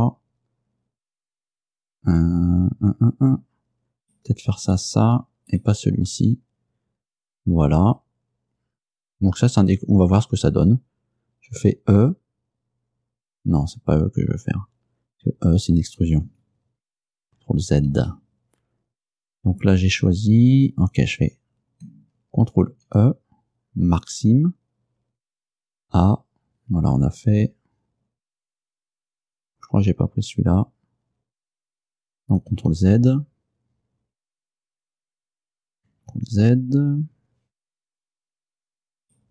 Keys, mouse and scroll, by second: 4.1 shift+right click, 4.7 shift+right click, 5.0 shift+middle click, 5.6 shift+right click, 11.6 e, 16.3 Escape, 18.0 ctrl+z, 22.8 ctrl+e, 24.1 click, 25.6 a, 32.6 ctrl+z, 36.2 ctrl+z, 39.1 right click.